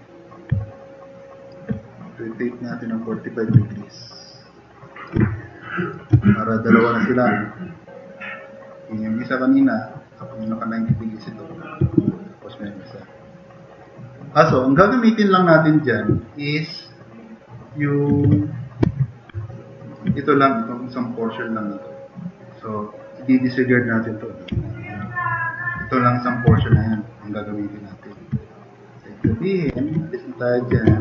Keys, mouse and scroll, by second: 0.8-1.3 drag, 2.6-5.0 drag, 5.3-5.9 drag, 6.1 alt+q, 6.7-8.2 drag, 12.0 alt+q, 12.5-13.2 drag, 16.2-16.6 drag, 17.6-17.9 drag, 18.3 q, 18.8 s, 19.4-20.0 drag, 24.5 Delete, 26.5 e, 26.7-28.1 drag, 29.7 alt+q, 30.9 alt+q.